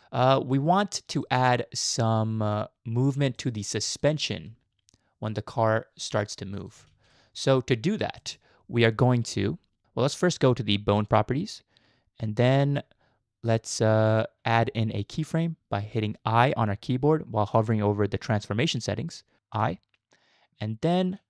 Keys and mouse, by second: 0.0-0.9 middle drag, 1.2 shift+middle drag, 2.0-2.6 middle drag, 3.4 shift+middle drag, 4.4 g, 7.0 ctrl+z, 8.2 shift+middle click, 11.1 click, 19.6 i.